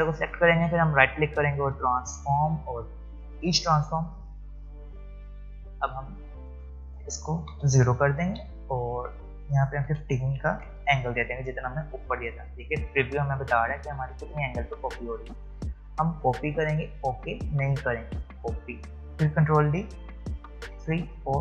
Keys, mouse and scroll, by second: 1.3 right click, 2.2-6.7 drag, 9.1 click, 12.3 click, 18.2 click, 19.8 ctrl+d.